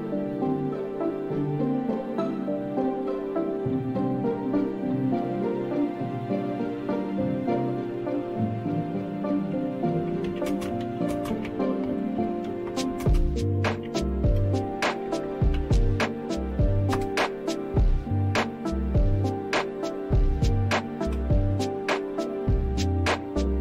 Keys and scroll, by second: 0.0-1.7 scroll up 1, 1.7-2.5 scroll up 1, 2.5-3.9 scroll up 1, 3.9-5.5 scroll up 1, 5.5-7.1 scroll up 1, 7.1-8.1 scroll up 1, 8.1-9.6 scroll up 1, 9.6-9.9 scroll up 1, 9.7-15.5 typing, 16.9 Return, 21.0 Return.